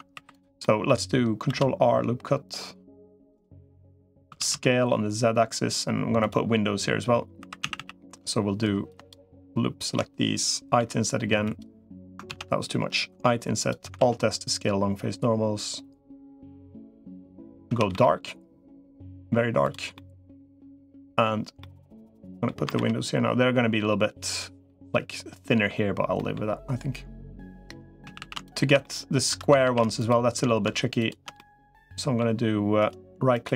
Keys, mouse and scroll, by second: 0.1 click, 0.1 3, 0.4 middle click, 1.3 ctrl+r, 3.4 middle click, 4.1 s, 7.3 3, 7.5 a, 9.1 alt+shift+click, 10.7 i, 12.1 ctrl+z, 12.9 i, 13.7 alt+s, 17.5 a, 17.7 g, 19.8 middle click, 20.8 middle click, 21.4 middle click, 22.5 ctrl+r, 24.4 middle click, 25.3 middle click, 25.9 middle click, 27.9 a, 28.6 middle click, 29.3 a, 29.3 2, 29.5 a, 31.2 middle click, 32.7 right click.